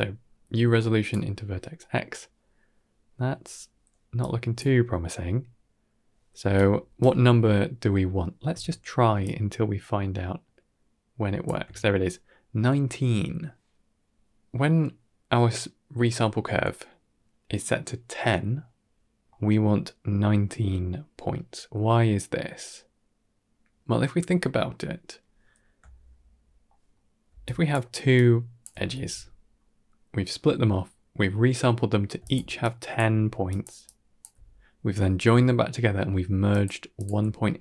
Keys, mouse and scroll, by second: 1.7 middle click, 4.1-4.4 drag, 6.3 d, 6.4 right click, 6.9 d, 6.9 d, 7.4 middle click, 9.1-11.4 shift+drag, 13.6 middle click, 14.6 middle click, 17.4 middle click, 17.9 middle click, 23.1-25.1 middle drag, 25.4 scroll down 2, 25.8 shift+middle click, 26.8 shift+middle click, 27.2 d, 27.3 click, 27.7-28.0 d, 28.0 click, 28.5 d, 28.6 d, 32.0-34.1 typing, 32.1 click, 32.5 click, 33.4 click, 33.8 click, 35.9-37.1 typing, 36.4 click, 36.8 click.